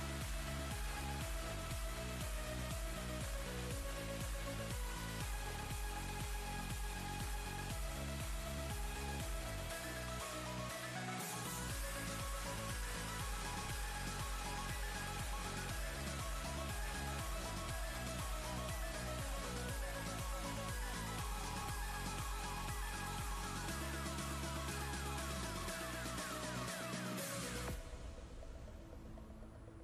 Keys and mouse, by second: 0.5 space, 0.6-1.8 click, 2.6-5.1 drag, 9.2-10.1 click, 12.3 ctrl+z, 12.7 click, 13.0-13.3 space, 15.0 click, 18.1 shift+click, 21.7-23.9 drag, 25.7 ctrl+space, 25.9-27.4 ctrl+click, 26.4 ctrl+space, 27.7 click.